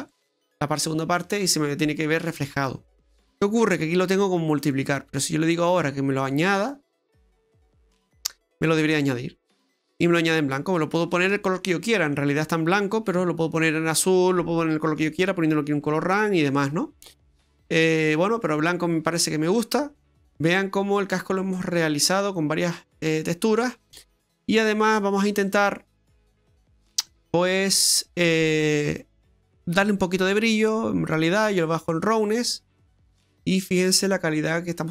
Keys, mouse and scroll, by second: 2.4-2.9 scroll up 3, 2.9 middle click, 3.4-4.0 scroll up 4, 4.6 click, 9.0 middle click, 10.9-11.4 scroll down 5, 11.4 middle click, 16.0-16.7 scroll down 7, 16.6 middle click, 17.0-18.0 scroll up 2, 18.0 scroll up 1, 18.5 middle click, 24.1 middle click, 25.5 click, 27.1 click, 28.3-28.8 scroll up 4, 29.0 middle click, 29.9-31.3 scroll up 9, 31.3 click, 33.4 middle click.